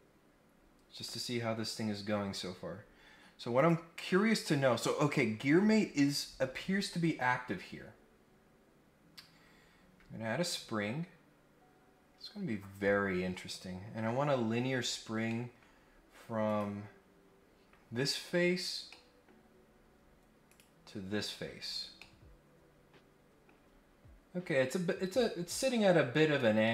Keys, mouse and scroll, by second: 0.1-0.4 scroll down 1, 0.5 scroll up 1, 0.9 scroll down 1, 1.2 scroll up 2, 3.5 click, 10.4 click, 14.1-14.4 scroll down 4, 14.5-15.0 scroll up 3, 15.2 middle click, 15.7 scroll up 1, 16.5 click, 17.6-18.9 scroll down 5, 18.9-19.2 scroll up 1, 19.5-20.0 scroll up 2, 20.1-20.5 scroll down 1, 20.5 click, 21.1 scroll down 1, 21.6 scroll up 1, 21.9-23.4 middle drag, 23.6-24.2 scroll down 2, 26.6-26.7 middle drag.